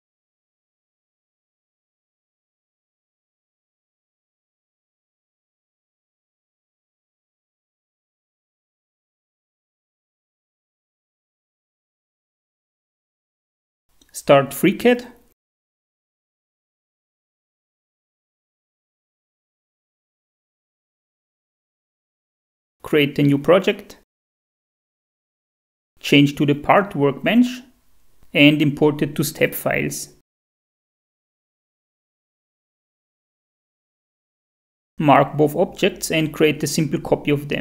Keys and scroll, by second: 0.0-0.2 typing, 13.6 F4, 34.4 shift+F4.